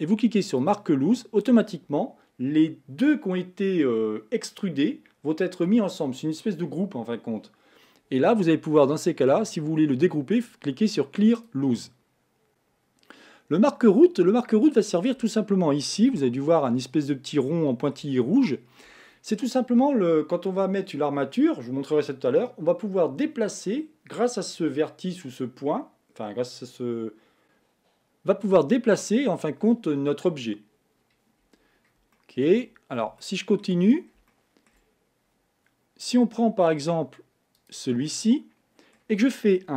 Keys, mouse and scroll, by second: 0.6 click, 11.4-12.7 drag, 14.7-15.3 scroll down 8, 16.2 shift+middle click, 16.8-17.5 scroll up 5, 17.5-20.5 shift+middle drag, 31.4 scroll down 2, 32.1 shift+middle click, 32.9 scroll up 1, 33.2 shift+middle click, 33.9 scroll up 3, 34.3 shift+middle click, 34.9 scroll up 2, 37.5 click, 38.1-39.7 middle drag.